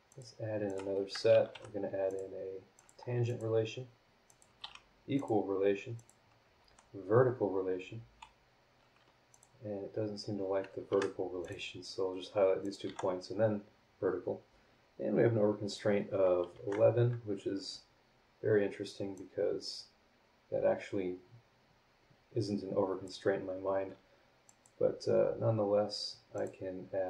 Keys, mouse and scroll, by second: 0.1 click, 0.7 click, 1.0 Escape, 1.5 t, 2.1 click, 2.7 click, 3.3 click, 4.3 click, 4.6 e, 5.2 click, 6.0 click, 6.6 v, 9.3 click, 10.9 Escape, 11.4 click, 12.6 click, 12.8 v, 14.6 scroll down 2, 15.7 click, 16.5 Delete, 19.1-23.2 drag, 24.4 click, 26.3 click.